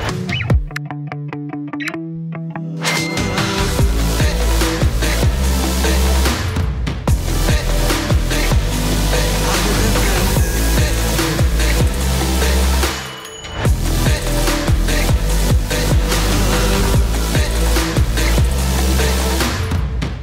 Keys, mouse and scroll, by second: 12.4-13.6 drag, 14.5 right click, 15.2 click, 17.4 Return, 18.3-20.2 typing.